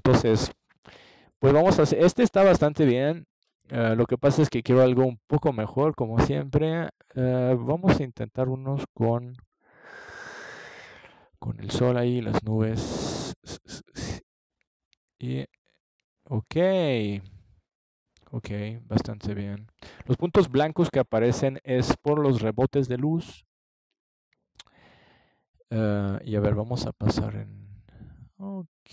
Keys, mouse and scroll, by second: 0.7-2.0 middle drag, 9.2-10.9 middle drag, 13.9-15.5 drag, 15.7-18.3 middle drag, 18.3 click, 19.6 click, 20.4 click, 22.5-24.2 drag, 28.3-28.9 drag.